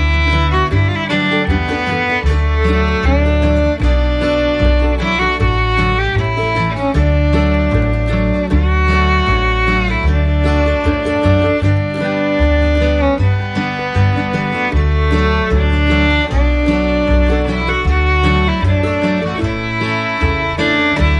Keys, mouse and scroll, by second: 5.0 alt+click, 6.8 double click, 9.0 Up, 9.4 Up, 9.8 Up, 9.9 Up, 10.1 Up, 12.5 Up, 12.5 Up, 12.7 Down, 15.8 Right, 15.9 Right, 16.5 Down, 17.1 Down, 17.4 Down.